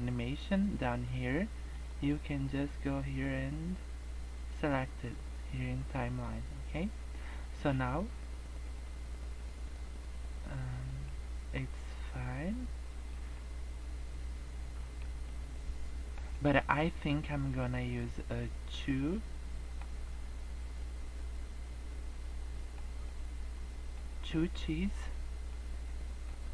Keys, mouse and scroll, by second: 1.6 click, 8.0 click, 11.0 middle click, 13.3 middle click, 15.1 scroll down 1, 15.3 middle click, 16.3 middle click, 16.8 scroll down 2, 17.0 scroll up 2, 17.5 middle click, 20.0-20.5 scroll up 2, 20.8 middle click, 23.0 middle click, 25.6 click.